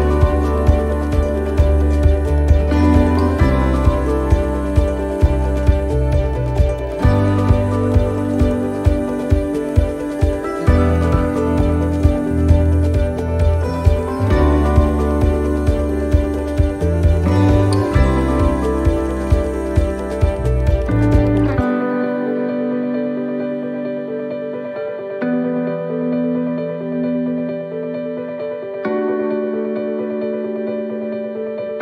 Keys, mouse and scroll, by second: 0.5 right click, 1.3 shift+right click, 3.5 shift+right click, 10.1 shift+d, 11.2-11.8 scroll down 1, 12.0 middle click, 12.0 scroll down 3, 12.4 shift+middle click, 12.9 scroll down 2, 14.1 click, 16.9 shift+middle click, 17.6 middle click, 18.3 shift+middle click, 19.5 click, 20.9 middle click, 21.7-22.2 scroll up 1, 22.2 scroll up 2, 22.4 shift+middle click, 22.9-23.4 scroll up 3, 23.4 shift+middle click, 24.2 middle click, 24.8 shift+middle click, 25.3-25.8 scroll up 2, 25.8 middle click, 27.3 click, 29.0 a, 29.9 click.